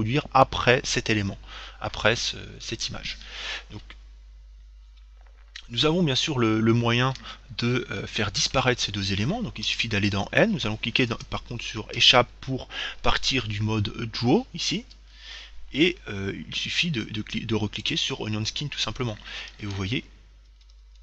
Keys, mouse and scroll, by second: 9.9 n, 18.1-19.7 drag, 20.0 Left.